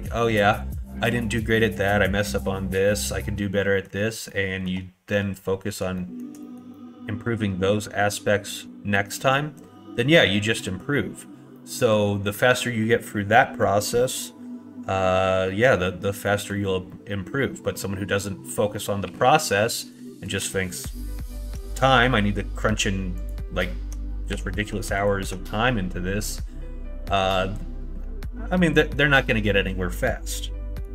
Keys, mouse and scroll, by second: 2.8-3.9 middle drag, 4.2 scroll up 1, 4.3 middle click, 5.9 shift+middle click, 6.4 middle click, 6.7-8.1 middle drag, 9.5 middle click, 11.5 middle click, 13.6 middle click, 16.2 middle click, 19.0 2, 20.0 shift+middle click, 20.5 middle click, 23.2 alt+click, 24.3 2, 25.0 click, 30.0 middle click.